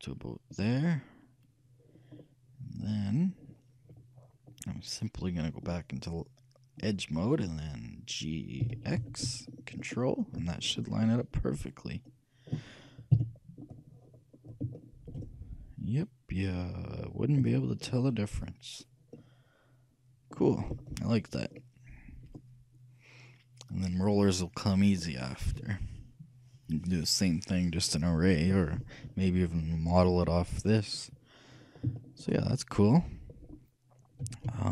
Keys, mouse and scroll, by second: 1.8-7.4 middle drag, 5.7-7.6 drag, 8.7 g, 10.7-12.7 middle drag, 13.2 KP_3, 14.3-17.7 middle drag, 19.5-23.5 shift+middle drag, 29.4-30.9 middle drag, 32.2-34.3 shift+middle drag, 34.3 shift+a, 34.5 shift+a.